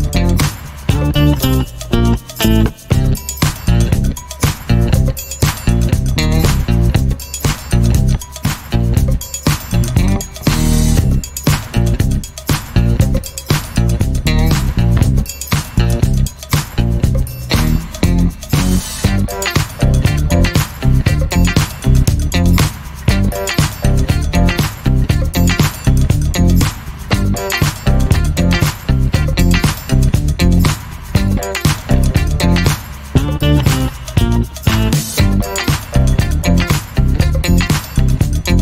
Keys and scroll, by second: 3.7 ctrl+t, 6.1 m, 8.5 m, 21.2 2, 27.4-28.2 typing.